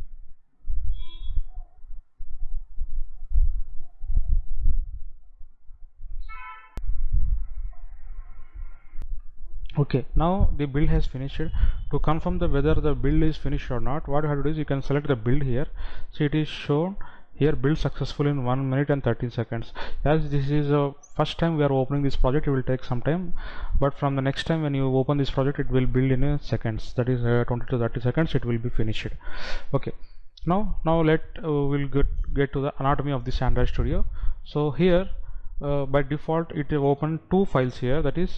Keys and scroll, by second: 0.0 F9, 6.9 F9, 9.1 F9.